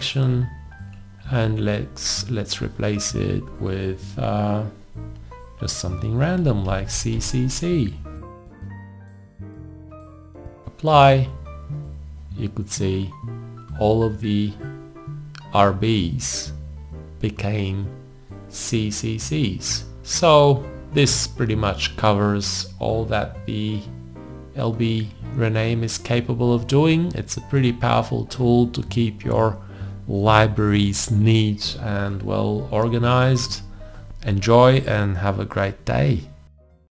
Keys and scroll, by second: 6.7 shift+c.